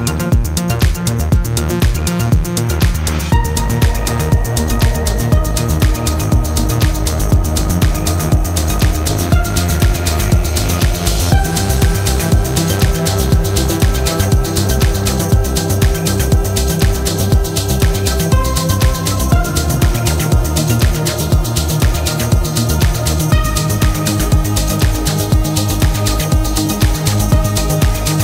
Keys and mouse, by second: 2.3-2.7 middle drag, 3.0 click, 4.1-6.5 drag, 8.0-10.5 drag, 10.9-15.0 middle drag, 18.3 click, 22.4-23.1 drag, 24.5-25.2 drag, 26.8-27.7 drag.